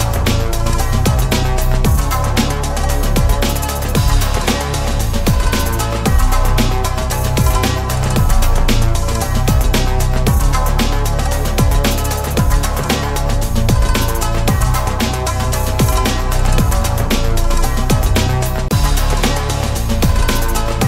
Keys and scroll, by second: 1.8 ctrl+s.